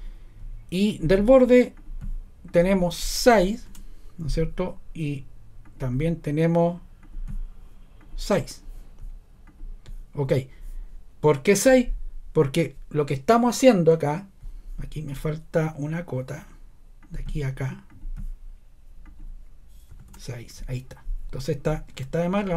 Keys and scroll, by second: 0.8 typing, 3.1-3.8 typing, 5.7 typing, 19.9 6, 20.0 Return, 21.9 ⟲.